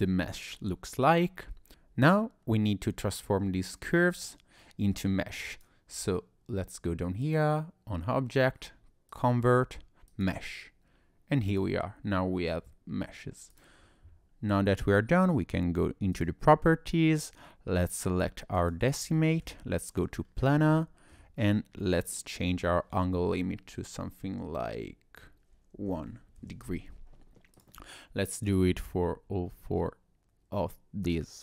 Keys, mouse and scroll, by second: 5.0 click, 7.2 click, 11.5 click, 13.5 click, 16.2 click, 19.2 shift+middle click, 19.9 click, 20.2-20.7 scroll up 2, 20.7 shift+middle click, 22.0 click, 27.6 click, 28.5 click.